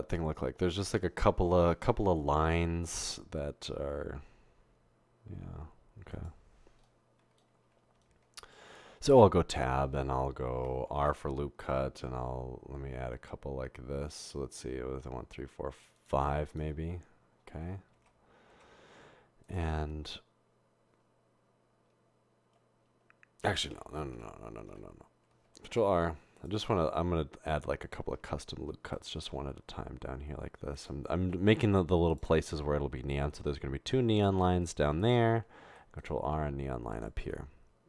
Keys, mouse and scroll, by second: 9.3 Tab, 11.0 ctrl+r, 18.1 Tab, 18.5 Tab, 23.8 ctrl+z, 24.0 ctrl+z, 24.2 ctrl+z, 25.2 ctrl+z, 25.7 ctrl+r, 28.3 ctrl+r, 31.8 ctrl+r, 35.8 ctrl+r.